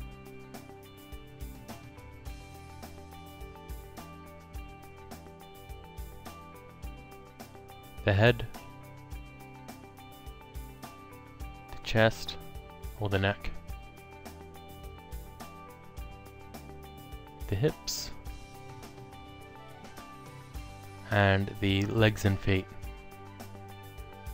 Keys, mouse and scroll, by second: 0.0 click, 1.7 ctrl+click, 3.6 super+middle click, 4.1 click, 5.1 alt+middle click, 6.1 alt+click, 7.1 click, 8.4 ctrl+click, 9.6 click, 10.9 click, 11.9 ctrl+click, 13.1 click, 14.8 click, 16.8 ctrl+click, 17.9 click, 18.8 alt+middle click, 20.4 click, 21.2 ctrl+click, 22.7 click.